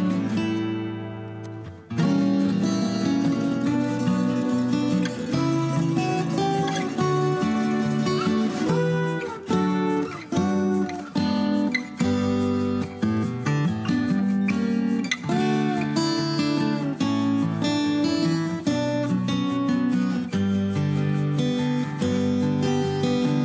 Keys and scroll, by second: 1.3 p, 2.6 Escape, 3.7 Escape, 4.5 ctrl+h, 4.8 ctrl+h, 6.1-7.8 typing, 9.4 Escape, 10.3 p, 11.1 Escape, 12.0 h, 18.6 i, 20.6-22.1 typing.